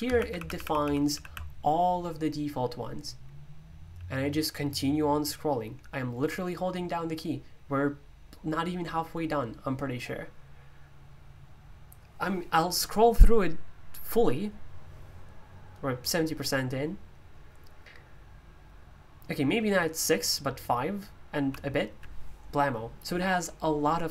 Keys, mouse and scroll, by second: 0.1-21.3 typing.